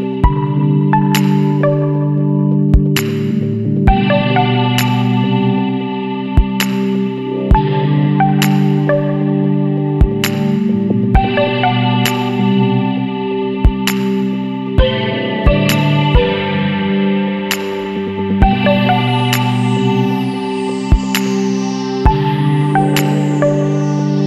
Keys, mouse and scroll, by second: 1.0 click, 3.0 click, 5.7 Escape, 7.3 click, 8.8 click, 9.8 scroll down 1, 10.4 scroll up 1, 11.2 click, 11.9 KP_1, 12.2 KP_Enter, 14.4 click, 15.5 KP_6, 15.8 KP_Enter, 18.0 click, 19.2 click, 20.5 KP_5, 20.7 KP_3, 21.1 KP_Enter, 23.2 click.